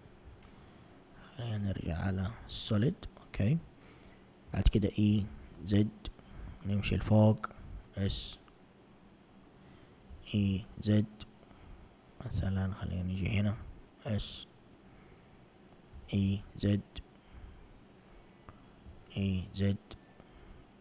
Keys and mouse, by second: 2.2 click, 4.5 e, 7.6 s, 10.1 e, 13.6 s, 16.0 e, 18.9 e.